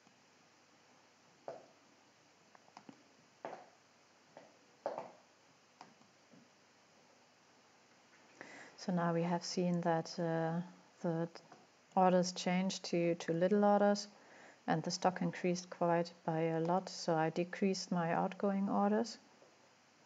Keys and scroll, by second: 10.1 5.